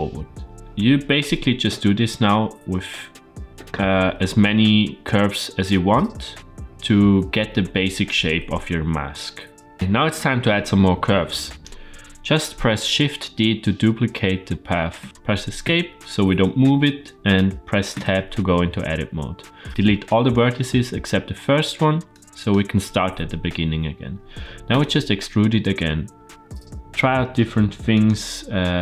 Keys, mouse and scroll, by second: 9.0 shift+middle click, 9.7 ctrl+z, 14.8 shift+d, 17.8 Tab, 19.7-20.9 drag, 21.4 x, 22.3 click, 23.0 x, 24.4 click, 24.6 e, 28.0 e.